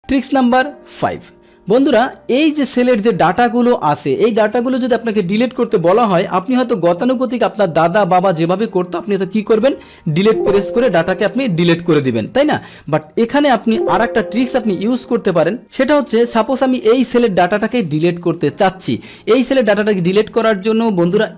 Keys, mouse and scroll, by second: 2.0 click, 2.9 click, 3.6 click, 4.0 click, 4.8 click, 10.2 Delete, 12.4 click, 12.9 click, 13.9 Delete, 14.9 click, 16.3 click, 17.0 click.